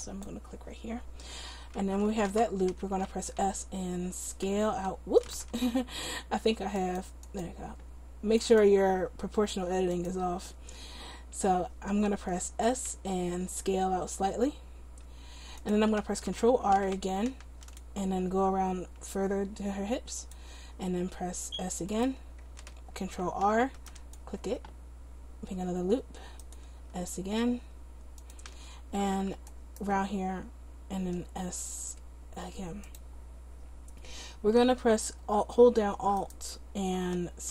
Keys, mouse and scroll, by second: 4.5 s, 5.7 ctrl+z, 6.8-13.0 drag, 13.0 s, 16.8 ctrl+r, 21.0 s, 23.1 ctrl+r, 27.1 s, 29.6-31.1 right drag, 31.1 s, 36.3-37.5 right drag.